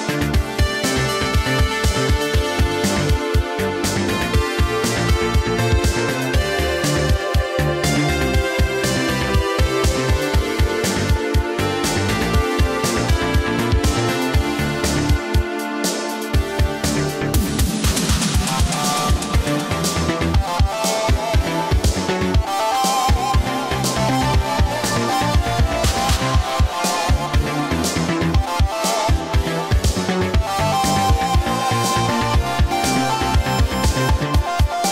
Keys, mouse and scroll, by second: 3.1 space, 4.3 BackSpace, 5.4 click, 6.9 right click, 7.9 click, 10.9 space, 12.0 Return, 13.4 click, 21.1 click, 22.3 right click, 23.8 click, 26.2 Right, 27.0 Return, 28.9 click, 31.5 click, 33.5-34.9 scroll down 1.